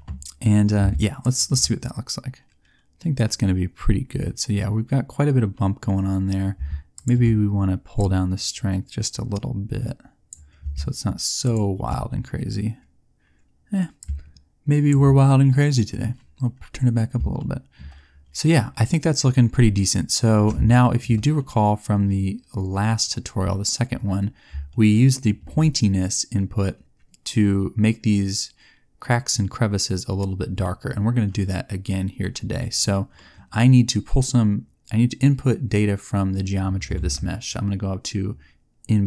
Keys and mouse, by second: 1.2 middle click, 11.3 click, 12.0-13.4 middle drag, 14.1 middle click, 14.4 middle click, 36.9 shift+a.